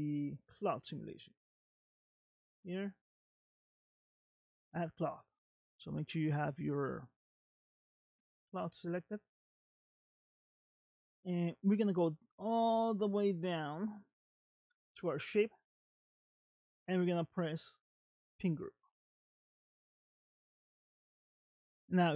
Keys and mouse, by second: 8.9 click, 15.2 click, 18.6-20.3 drag, 21.6-22.1 middle drag.